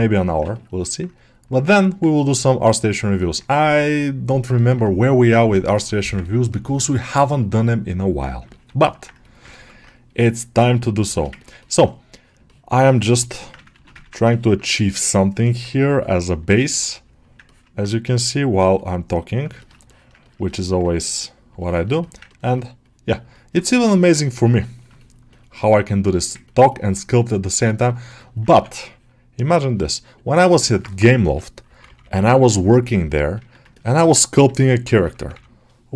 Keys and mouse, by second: 0.1 alt+middle click, 0.4 ctrl+alt+middle click, 0.7 alt+middle click, 1.4 middle click, 3.1 middle click, 4.4 alt+middle click, 5.6 middle click, 6.1 ctrl+alt+middle click, 6.4 alt+middle click, 6.8 ctrl+middle click, 7.0 middle click, 7.7 click, 8.4 alt+middle click, 8.7 ctrl+alt+middle click, 9.4 ctrl+alt+middle click, 10.0 right click, 11.0 shift+middle click, 11.3 ctrl+middle click, 11.5 middle click, 12.3 middle click, 13.6 ctrl+r, 13.9 ctrl+alt+middle click, 14.2 middle click, 15.3 alt+middle click, 15.9 click, 16.7 alt+middle click, 17.3 ctrl+middle click, 17.9 middle click, 19.5 ctrl+alt+middle click, 19.8 middle click, 20.1 ctrl+alt+middle click, 21.5 middle click, 21.9 alt+middle click, 22.2 ctrl+middle click, 23.2 alt+middle click, 24.9 shift+middle click, 25.2 shift+middle click, 26.0 alt+middle click, 26.6 middle click, 27.2 click, 27.7 shift+middle click, 28.1 middle click, 28.8-29.9 ctrl+drag, 30.1 ctrl+click, 30.5 middle click, 31.1 m, 31.5 [, 31.7 [, 32.3 middle click, 33.2-35.0 typing, 33.6 ctrl+alt+middle click.